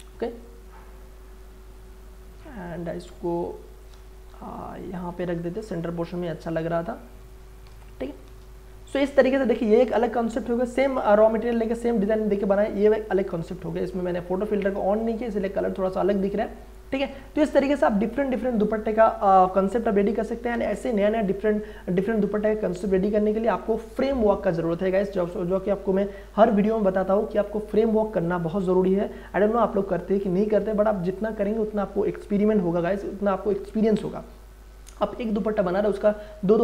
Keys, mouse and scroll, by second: 0.4-2.3 drag, 3.1-3.8 scroll up 1, 3.8 click, 4.2 ctrl+t, 4.7 click, 5.7 Return, 7.3 click, 7.8 space, 8.0 ctrl+click, 8.9 ctrl+h, 12.4 click, 13.9-14.9 scroll up 1, 14.9 click.